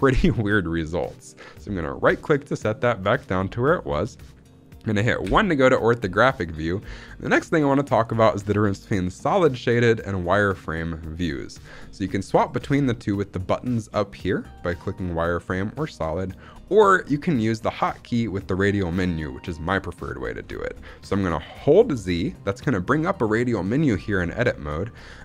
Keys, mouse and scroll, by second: 1.8-3.5 right drag, 5.1 KP_1, 6.2-8.2 scroll up 1, 14.8 click, 15.7 click, 21.5 z.